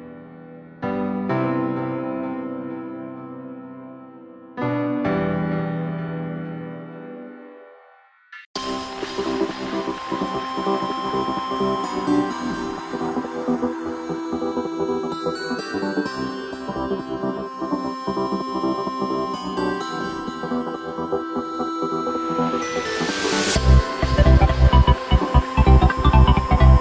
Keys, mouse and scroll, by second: 1.0 scroll up 2, 1.5-1.9 scroll down 1, 1.9 middle click, 2.5 shift+right click, 2.9 middle click, 3.5 alt+e, 6.4 Tab, 6.6-8.4 scroll down 5, 8.4 ctrl+KP_3, 8.7 scroll up 1, 8.8 scroll down 1, 8.9-10.1 scroll up 2, 10.1 g, 12.5-13.0 scroll up 3, 13.0 middle click, 13.7-14.4 scroll down 1, 14.4 KP_1, 14.7-15.4 scroll down 2, 16.0 ctrl+KP_3, 16.5-17.0 scroll up 2, 17.0 Tab, 17.8 s, 20.1 Tab, 21.3 Tab, 21.8 2, 22.2 right click, 23.1 right click, 23.6 alt+shift+right click, 24.4 right click, 24.8 alt+shift+right click, 25.1 alt+shift+right click, 25.6 alt+shift+right click, 26.6 ctrl+z.